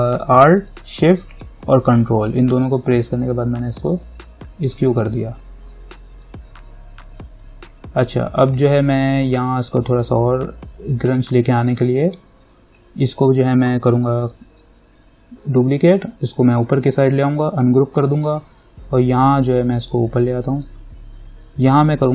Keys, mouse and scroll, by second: 4.2 alt+click, 8.7 click, 11.4 click, 14.4 ctrl+j, 14.9-17.1 drag, 19.7-22.1 drag.